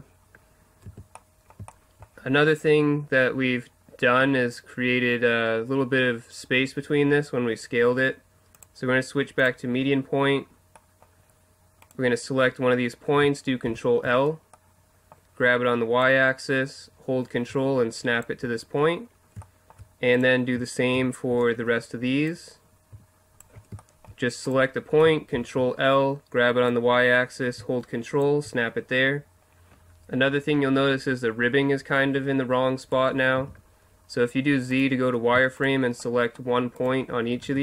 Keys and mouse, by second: 0.9 a, 8.5-10.3 drag, 10.3 middle click, 11.8-13.6 right drag, 13.6 ctrl+l, 16.0-17.8 drag, 19.4 middle click, 20.2 right click, 20.9 ctrl+l, 22.3-23.8 drag, 23.8 middle click, 25.3 ctrl+l, 26.7-28.2 drag, 31.3-33.3 middle drag, 33.3 z, 34.7-36.3 right drag, 36.3 click.